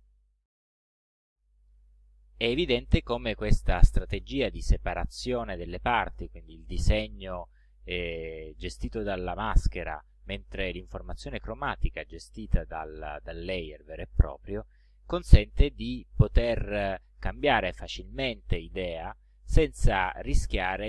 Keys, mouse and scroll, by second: 17.8 click.